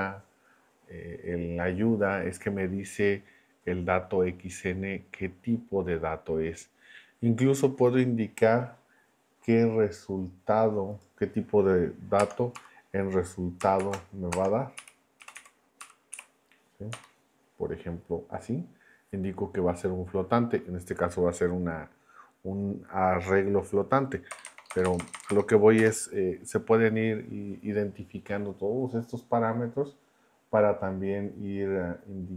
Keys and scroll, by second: 12.2 space, 12.5 -, 13.8-16.9 typing, 24.3 BackSpace.